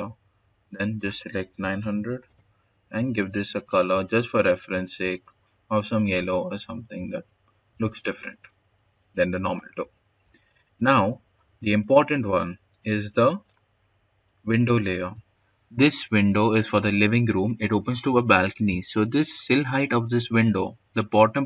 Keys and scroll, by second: 1.2-2.3 typing, 6.4-8.1 typing, 9.6 s, 14.1 s.